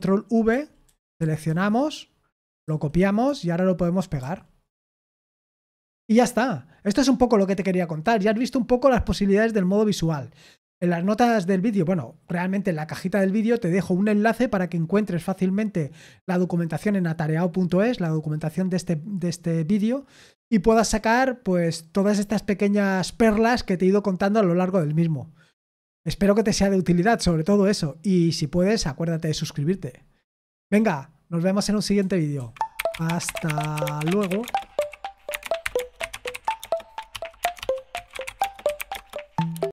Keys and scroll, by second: 0.2-2.6 typing, 4.2 shift+p, 32.4 super+z.